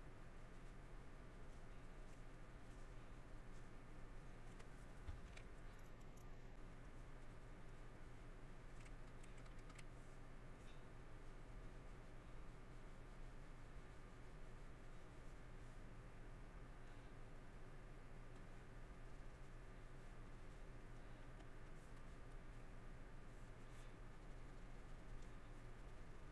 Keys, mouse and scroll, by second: 1.5 middle click, 2.1 middle click, 2.7 middle click, 3.6 middle click, 4.2 middle click, 6.1 scroll, 6.3 shift+middle click, 7.5 middle click, 8.8 middle click, 10.8 middle click, 15.3 middle click, 16.8 middle click, 17.3 middle click, 18.8 middle click, 19.5 middle click, 20.6 middle click, 22.6 middle click, 25.3 middle click.